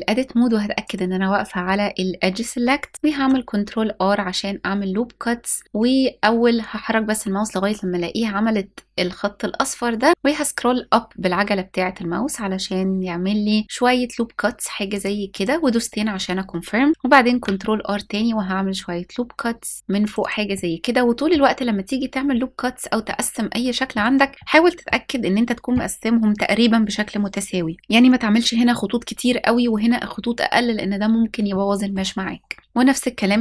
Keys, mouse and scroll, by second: 0.5 click, 2.9 ctrl+r, 14.9 click, 16.9 ctrl+r, 19.8 click, 20.2 middle click, 22.2-22.7 scroll up 2, 22.7 middle click, 24.3 middle click, 31.1 middle click, 31.9-32.9 scroll down 1, 33.3 ctrl+r.